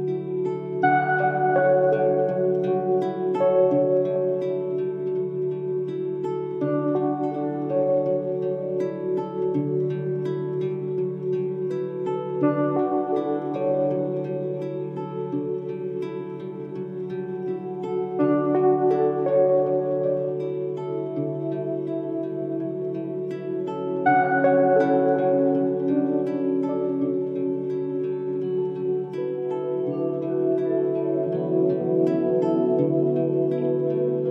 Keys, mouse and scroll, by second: 8.7 right click, 11.0 2, 11.2 5, 11.5 Return, 16.1 2, 16.5 5, 16.6 Return, 22.6 1, 22.8 3, 23.0 5, 23.4 Return, 25.4 Escape.